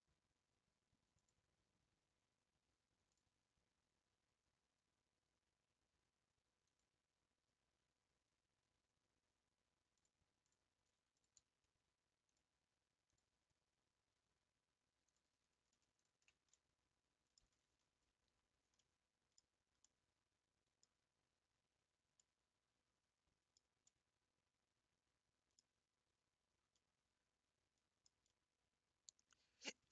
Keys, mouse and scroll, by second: 1.3 shift+s, 7.7-9.3 scroll up 7, 10.2 click, 10.5 click, 11.2 shift+click, 13.3 click, 13.5 scroll up 3, 15.1 click, 16.5-19.5 middle drag, 19.5 scroll down 3, 19.8-21.8 middle drag, 21.8-22.2 scroll up 3, 22.2-29.9 middle drag.